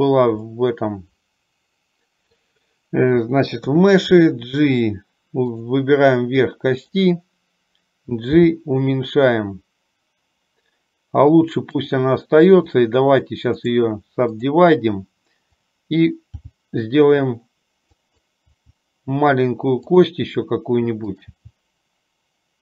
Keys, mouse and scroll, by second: 0.7-2.7 middle drag, 3.7 KP_3, 8.4 g, 12.8 click, 16.4 g, 18.5 g, 21.3 click.